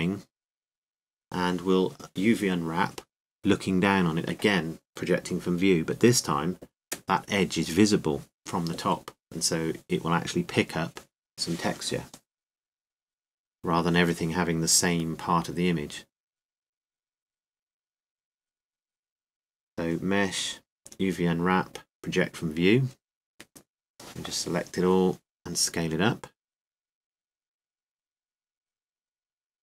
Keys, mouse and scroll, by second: 2.0-9.8 drag, 11.4 Tab, 12.4 a, 12.8 a, 14.5-16.7 drag, 19.4 a, 19.9 a, 21.0 click, 26.0 a, 26.4 a, 28.1 s.